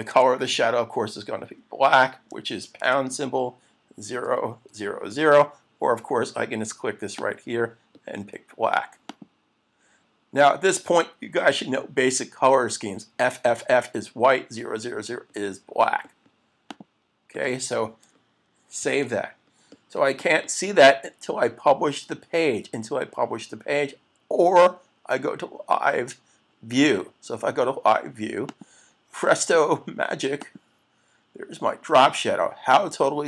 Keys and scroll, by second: 0.1 Tab, 2.8 shift+3, 18.8 super+s.